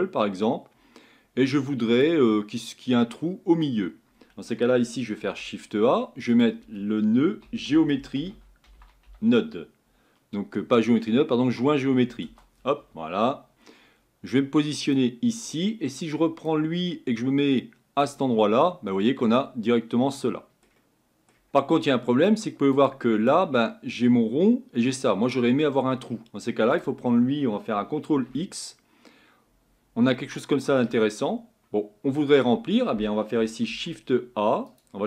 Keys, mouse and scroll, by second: 18.0 click, 19.4-28.1 middle drag, 28.1 ctrl+x, 30.1-35.0 middle drag.